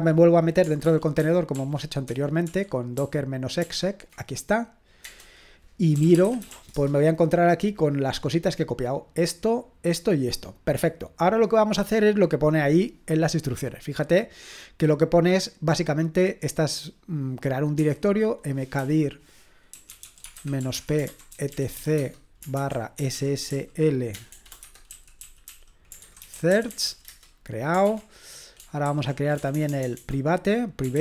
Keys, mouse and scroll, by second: 0.9 ctrl+p, 1.2 ctrl+p, 1.5 ctrl+p, 2.1 ctrl+p, 5.0 Return, 5.7-7.0 typing, 8.8-13.8 drag, 13.8-15.0 scroll down 1, 15.0-16.3 scroll down 1, 16.3-17.8 scroll down 1, 17.8-27.4 typing, 27.9 Return, 29.1-30.4 typing.